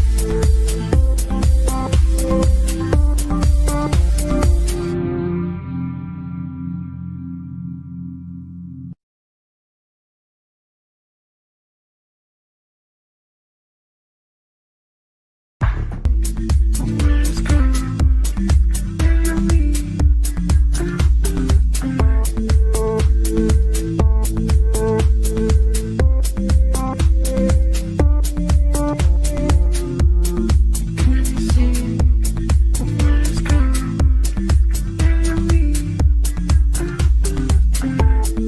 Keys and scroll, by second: 7.2 Delete.